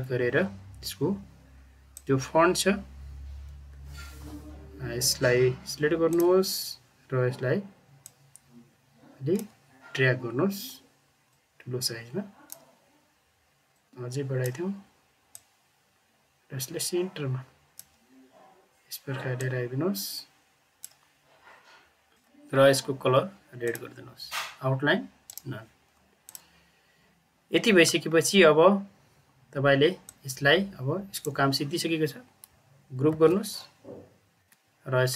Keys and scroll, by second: 33.0 ctrl+g, 34.4 Caps_Lock.